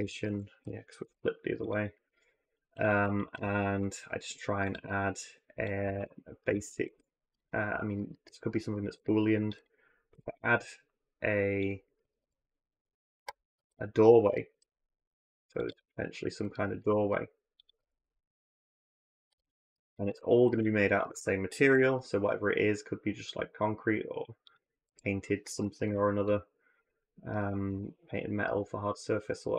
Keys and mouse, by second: 0.0 a, 0.8 alt+n, 3.5 ctrl+r, 5.6 a, 5.8 a, 6.5 ctrl+r, 8.7 ctrl+r, 9.9 ctrl+b, 11.8-14.3 typing, 15.5-17.7 typing, 15.9 click, 16.3 click, 19.1 2, 21.4 ctrl+b, 24.4 a, 25.3 1, 27.1 shift+click, 27.5 x.